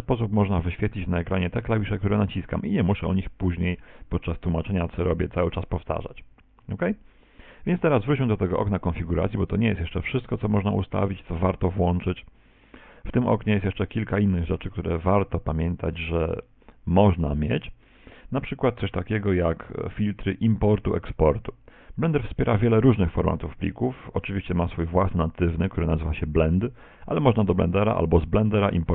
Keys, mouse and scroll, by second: 6.5 shift+c, 9.4 click.